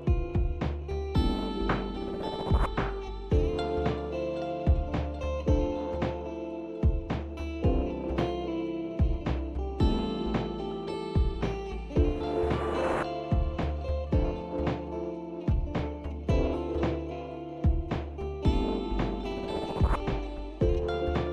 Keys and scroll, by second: 0.0-3.2 typing, 5.0-5.8 typing, 8.4 typing, 9.9 typing, 9.9 Tab, 10.6 Return.